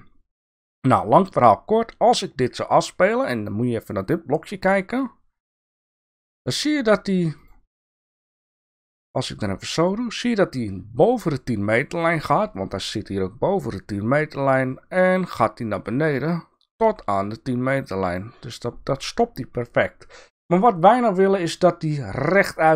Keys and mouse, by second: 7.4 click, 8.6-12.0 drag, 14.1-17.1 drag.